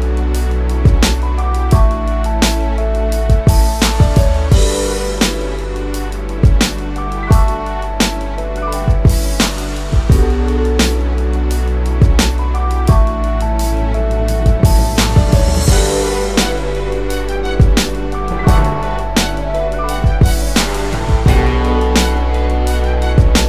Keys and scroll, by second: 0.7-1.2 space, 4.3 space, 4.8 space, 10.7 space, 13.6 space, 17.3 space.